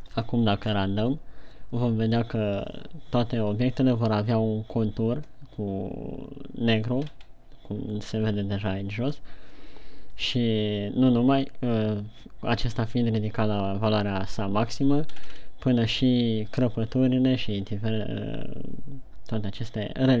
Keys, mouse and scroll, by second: 1.6 F12, 9.8-10.8 scroll up 2.